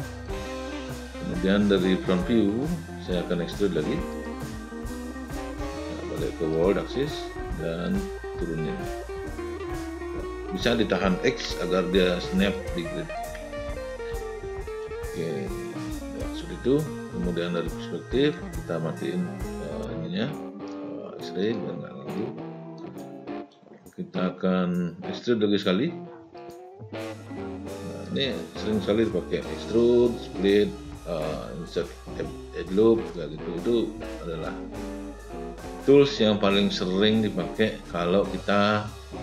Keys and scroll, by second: 11.2 x, 17.2 space.